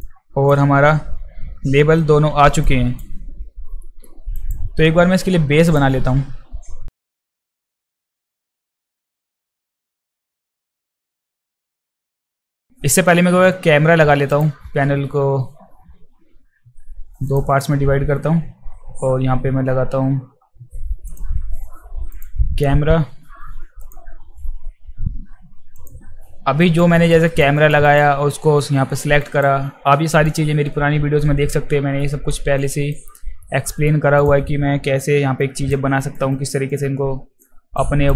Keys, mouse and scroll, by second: 0.0 alt+click, 2.6 alt+right click, 3.8 alt+middle click, 4.4 alt+right click, 5.7 click, 7.2 click, 7.5 alt+right click, 7.5 alt+click, 7.6 alt+click, 8.1 alt+click, 8.4 alt+click, 8.5 alt+click, 8.6 alt+right click, 9.4 middle click, 9.6 middle drag, 10.0 alt+click, 10.2 alt+middle click, 10.2 click, 10.2 space, 10.3 alt+right click, 10.5 alt+middle click, 10.6 alt+middle click, 10.7 click, 10.8 alt+right click, 10.8 alt+middle click, 10.9 alt+right click, 11.0 click, 11.1 alt+right click, 11.2 alt+middle click, 11.2 alt+right click, 11.3 alt+right click, 11.5 alt+drag, 11.5 alt+right click, 11.6 alt+click, 11.8 click, 11.9 click, 12.1 alt+right click, 12.2 click, 12.4 click, 12.5 alt+middle click, 12.6 alt+click, 14.3 click, 17.3 click, 21.1 click, 22.1 click, 23.8 click, 25.8 click, 26.6 alt+right drag, 26.9 alt+right drag, 27.3 alt+right drag, 27.6 alt+right drag, 27.8 alt+right drag, 29.2 alt+right drag, 30.2 click, 30.2 right click, 32.0 alt+middle drag, 32.6 alt+drag, 33.1 alt+middle drag, 33.6 alt+middle drag, 34.2 click, 34.8 f, 35.4-35.7 alt+drag, 36.0 alt+right drag, 36.3 alt+right drag, 36.7 alt+click, 37.8 alt+click.